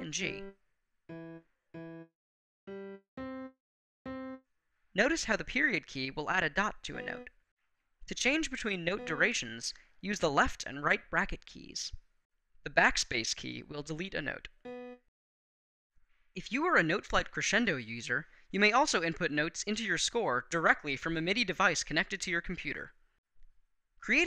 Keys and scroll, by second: 0.0 g, 0.8 e, 2.4 g, 2.9 c, 4.7 ., 5.8 Right, 6.7 b, 8.0 Right, 8.7 b, 10.0 [, 11.2 ], 13.0 BackSpace, 14.4 b.